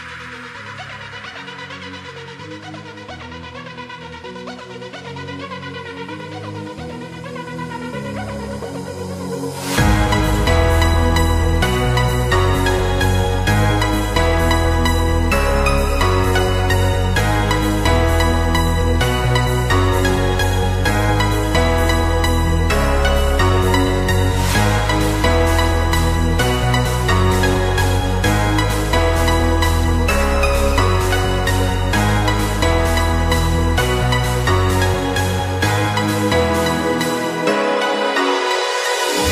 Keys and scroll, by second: 0.5 ctrl+z, 1.9 space, 4.2 ctrl+z, 7.9 space, 19.9 space, 23.3 ctrl+-, 25.5 ctrl+-, 26.3 ctrl+=, 27.3 ctrl+=, 27.4 space, 27.7 ctrl+=, 28.1 space, 28.9 ctrl+=, 32.1 space, 35.4 ctrl+z, 38.1 space, 39.2 ctrl+z.